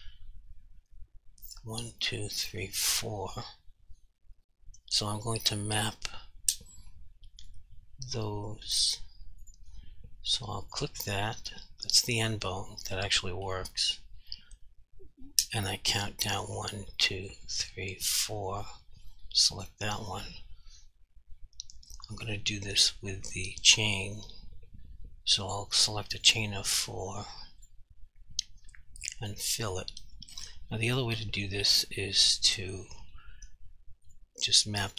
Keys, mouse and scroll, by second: 1.5 click, 5.2 click, 7.5 click, 12.6 g, 13.5 right click, 18.7 click, 22.1 click, 26.2 click, 26.7 double click, 27.0 click, 34.1 click.